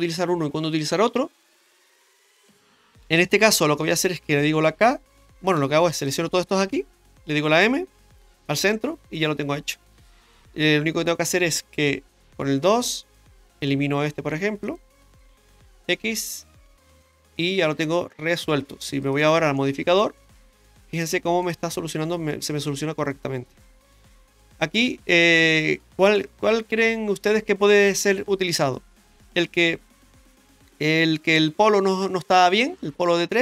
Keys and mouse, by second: 1.4 right click, 5.9 right click, 6.6 shift+right click, 7.0 shift+right click, 7.9 m, 10.3 right click, 12.2 w, 12.3 2, 12.8 right click, 14.6 shift+right click, 15.6 x, 17.3 middle click, 19.0 click, 19.6 middle click, 20.3 Tab, 20.7-21.0 middle drag, 23.6 Tab, 24.0 middle click, 24.9 shift+middle click, 25.5 middle click.